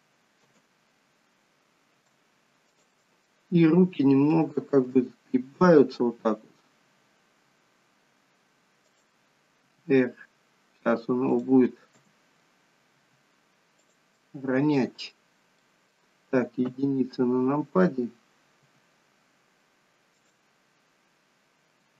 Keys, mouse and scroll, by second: 0.4 Escape, 0.8 click, 0.8 middle click, 2.6 shift+click, 3.1 middle click, 4.9 g, 9.6 r, 11.9 KP_3, 12.9 r, 14.1 middle click, 15.6 middle click, 16.6 KP_1, 18.6 r, 21.8 g.